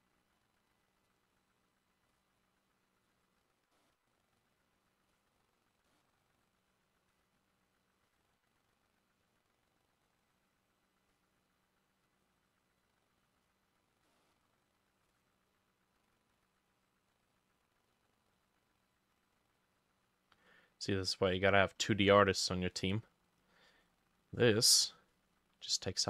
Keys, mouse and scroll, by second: 0.9 double click, 3.8 middle click, 5.9 middle click, 14.1 middle click, 18.9 double click, 19.2 double click, 19.6 double click, 22.8 middle click, 25.7 double click.